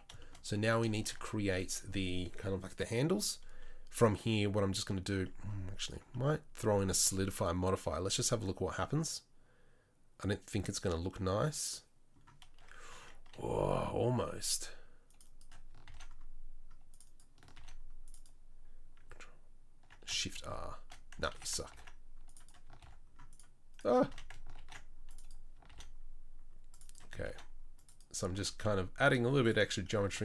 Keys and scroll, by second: 1.0 shift+s, 12.9 Tab, 14.1 ctrl+r, 15.9 ctrl+r, 17.6 ctrl+r, 20.5 shift+r, 21.4 ctrl+z, 21.7 ctrl+r, 22.8 ctrl+r, 24.2 ctrl+z, 24.6 ctrl+r, 25.7 ctrl+r, 27.2 ctrl+r, 28.3 ctrl+r.